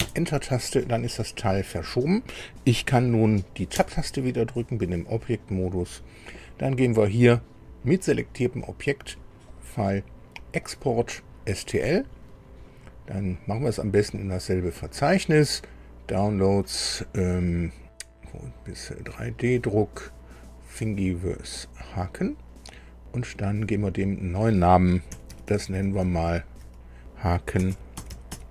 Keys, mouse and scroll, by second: 18.9 click, 20.3 click, 20.9 scroll down 2, 21.9 click, 23.5 click, 24.0 click, 25.0 Delete, 25.4 Delete, 25.6 Delete, 25.8 Delete, 26.0 Delete, 27.3-28.5 typing.